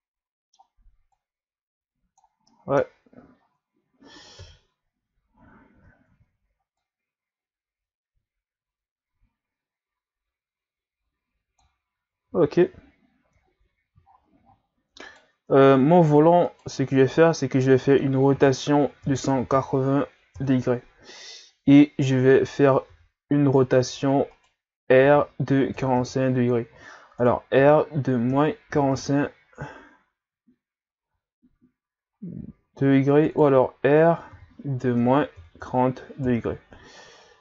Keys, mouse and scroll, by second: 1.1-2.5 drag, 2.5 middle click, 3.4-4.2 scroll down 1, 4.2 scroll down 1, 4.4 KP_3, 5.6 scroll up 3, 5.9 ctrl+scroll down 2, 6.8-10.9 drag, 12.3 Tab, 12.6 a, 12.8-13.5 scroll down 1, 13.5-14.1 ctrl+scroll up 2, 14.1-14.5 shift+scroll up 3, 14.9 scroll up 1, 15.1 right click, 15.6 ctrl+scroll up 4, 16.4 shift+right click, 18.4 r, 22.9 r, 25.0 r, 27.6 r, 34.4 r.